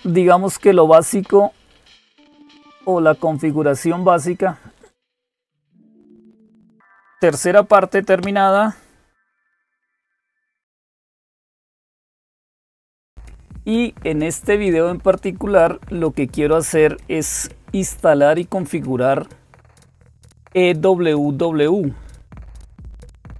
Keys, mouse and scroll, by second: 3.2 click, 20.9 click, 22.5-23.3 scroll down 2.